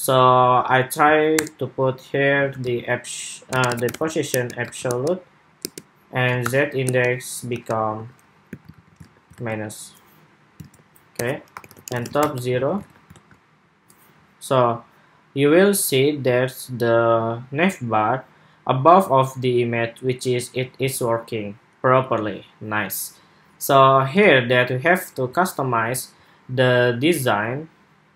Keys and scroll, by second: 8.5 super+s, 8.7 super+Tab, 9.1 super+r, 10.3 super+Tab, 12.3 super+s, 12.9 super+r, 20.7 super+Tab, 24.0 super+Tab.